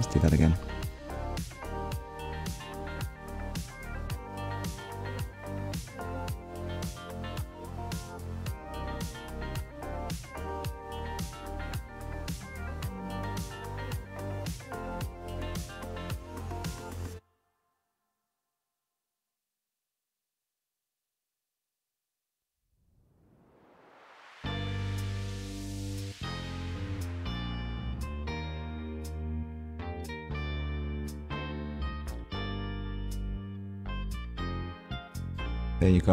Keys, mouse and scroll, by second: 0.6 scroll down 1, 1.1 shift+middle click, 1.7 middle click, 5.0 click, 6.5 KP_1, 7.6 shift+middle click, 8.6-8.9 scroll down 2, 9.0 shift+middle click, 13.0 click, 13.8 click, 14.2 middle click, 15.6 click, 16.2 click, 17.2 click, 17.5 shift+middle click, 17.9 middle click, 26.0 middle click, 27.4 click, 28.3-28.7 scroll down 1, 29.4 click, 30.0 click, 32.6 alt+d, 33.0 right click, 34.2 r.